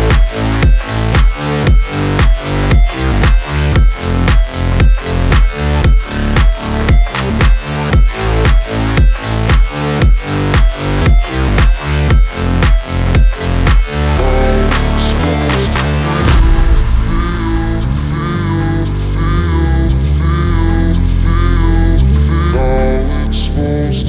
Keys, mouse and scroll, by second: 1.8 right click, 2.4 o, 3.1 alt+s, 5.4 click, 5.8 alt+z, 7.8 KP_1, 9.1 alt+z, 12.1 alt+s, 13.3 click, 13.5 ctrl+s, 16.2 KP_7, 17.1-18.1 scroll down 3, 18.1 s, 20.1 click, 20.5 Tab, 21.0-22.1 scroll up 7, 22.2 right click, 23.8 click.